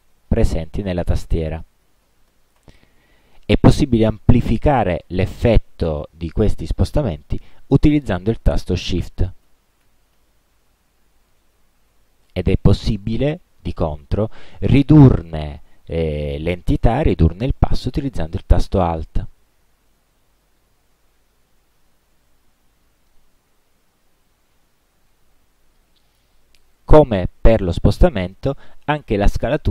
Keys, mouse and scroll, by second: 0.7 Down, 1.7 Up, 7.6 Left, 9.6 shift+Right, 10.6 shift+Left, 12.0 shift+Right, 19.4 alt+Down, 20.1 alt+Left, 21.9 alt+Right, 23.4 alt+Left.